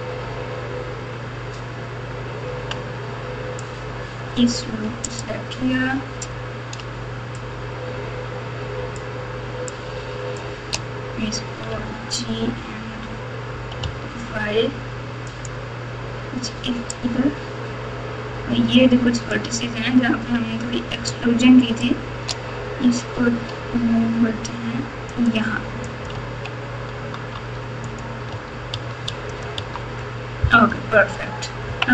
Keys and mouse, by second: 5.0 alt+click, 7.4-8.9 shift+drag, 9.7 shift+click, 9.9-10.3 shift+drag, 11.7 g, 16.9-19.3 drag, 21.0 shift+click, 21.4 shift+click, 23.1 g, 25.9 alt+click, 26.4 alt+z, 27.3 Tab, 27.8 click, 28.3 Tab, 28.7 Tab, 29.0 Tab, 29.3 click, 29.5 Tab, 30.6 KP_4, 30.9 KP_4, 31.6 KP_3.